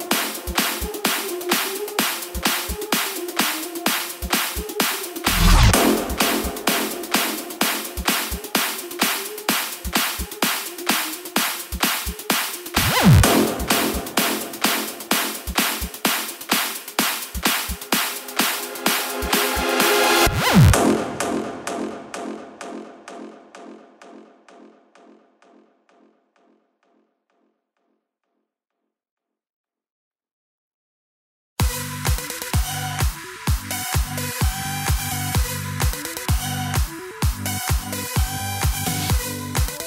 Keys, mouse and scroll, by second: 4.7 KP_0, 9.0 i, 9.9-13.6 drag, 17.6 click, 19.5 x, 20.9 click, 22.7 shift+d, 28.1 space, 33.8 space, 35.8-39.8 drag.